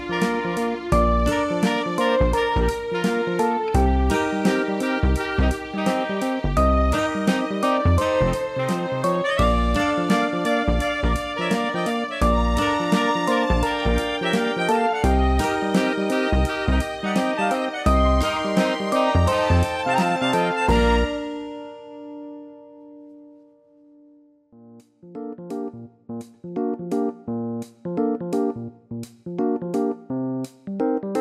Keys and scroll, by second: 10.6 ctrl+j, 21.5 ctrl+z.